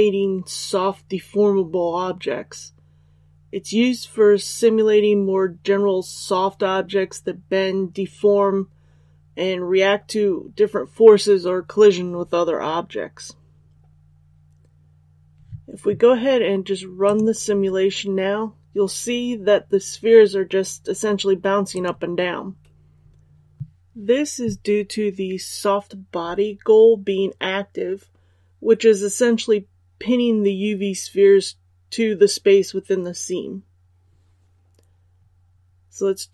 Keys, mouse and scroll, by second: 13.9 click.